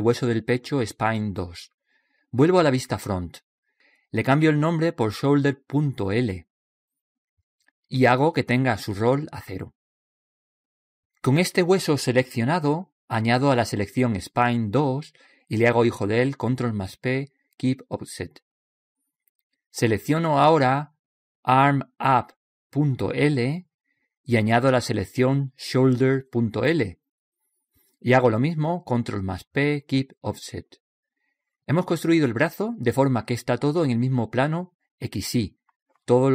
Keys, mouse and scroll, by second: 4.1 KP_1, 5.9 click, 16.7 right click, 17.8 ctrl+p, 22.0 right click, 26.3 right click, 29.1 ctrl+p, 32.9-36.1 middle drag.